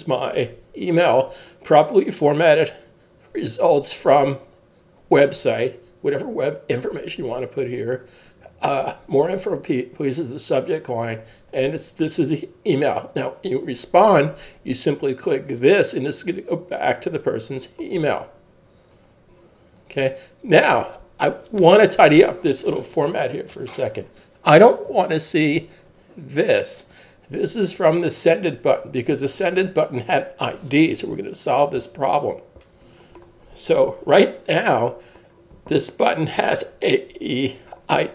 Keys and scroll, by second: 31.8 super+Tab.